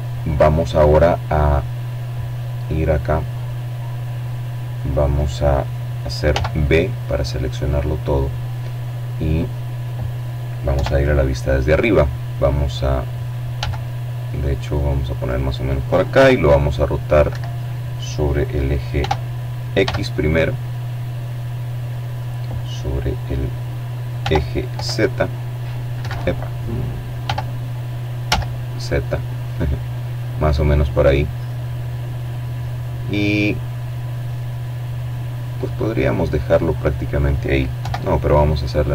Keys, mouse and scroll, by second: 0.1 middle click, 1.0-1.7 scroll down 1, 1.7 middle click, 3.8 b, 4.5-5.5 drag, 8.2 KP_7, 11.1 g, 12.7 click, 13.7 r, 14.8 Escape, 16.5 r, 17.3 x, 19.7 click, 21.6 r, 22.2 y, 23.4 Escape, 24.7 r, 25.7 z, 27.9 click, 28.8-30.3 drag, 32.1-33.5 middle drag, 35.3 KP_7, 35.9 scroll down 2, 36.0-36.9 scroll up 3, 37.9 r, 38.6 x.